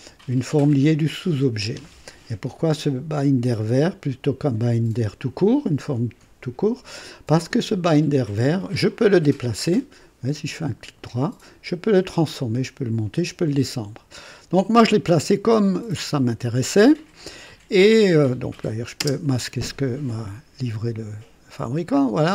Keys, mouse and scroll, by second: 7.7 click, 10.3 right click, 14.4 click, 14.9-18.3 drag, 18.6 click, 19.0 space, 20.0-22.3 drag.